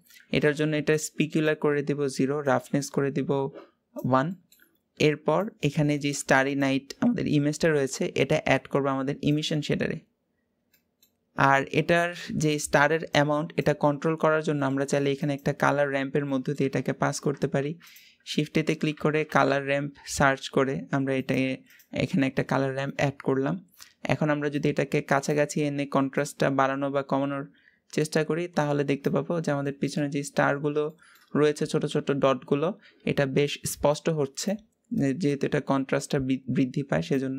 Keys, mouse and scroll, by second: 0.7-9.1 drag, 10.5-11.9 middle drag, 11.9-13.7 scroll up 3, 14.9 click, 15.7 scroll down 2, 16.0-16.5 shift+middle drag, 16.5-17.1 scroll up 4, 17.5 shift+a, 24.5-29.0 drag, 29.1 scroll down 3, 29.3-29.9 shift+middle drag, 29.9-30.6 scroll up 3, 30.6-33.8 shift+middle drag, 33.8-37.3 drag.